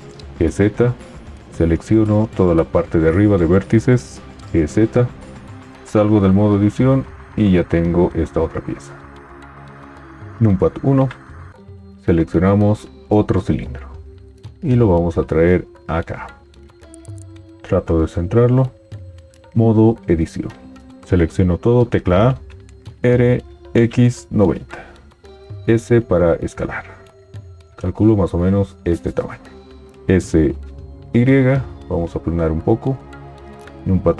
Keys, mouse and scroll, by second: 0.4 g, 4.4 g, 6.1 Tab, 10.2 KP_1, 15.3 g, 19.5 Tab, 22.0 a, 22.9 r, 25.7 s, 29.9 s, 33.8 KP_1.